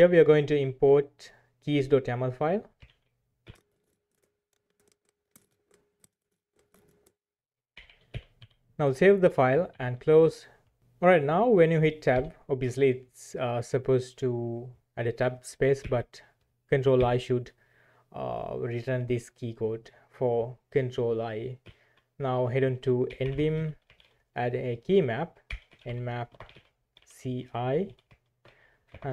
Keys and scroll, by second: 2.8-10.3 typing, 12.2 Tab, 15.8 BackSpace, 17.0 ctrl+i, 21.6 typing, 22.9-23.9 typing, 25.2-29.1 typing.